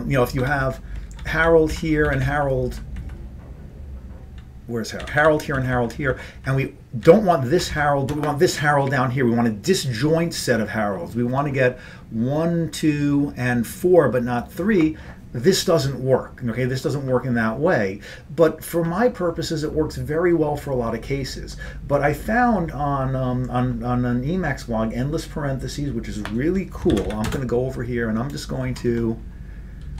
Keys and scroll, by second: 0.5 ctrl+g, 1.3 ctrl+p, 1.4 ctrl+p, 1.8 ctrl+n, 2.1 ctrl+n, 2.3 ctrl+n, 2.8 ctrl+n, 5.1 ctrl+p, 5.3 ctrl+p, 5.7 ctrl+n, 5.8 ctrl+n, 6.2 ctrl+n, 6.5 ctrl+n, 6.9 ctrl+n, 7.1 ctrl+p, 7.6 ctrl+n, 27.0 ctrl+x, 27.2 b, 27.3 Return, 28.8 Left, 29.0 Left, 29.9 Down.